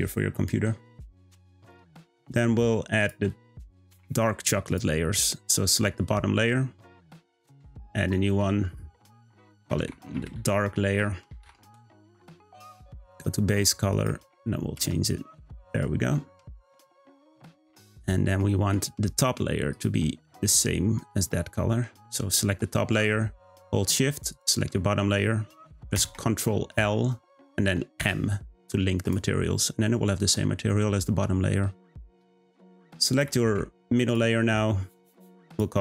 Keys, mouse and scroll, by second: 4.6 click, 7.1-10.6 drag, 12.9 click, 20.4 click, 21.1 click, 24.2 shift+click, 25.9 ctrl+l, 29.0 click, 34.1 click, 35.0-35.8 drag.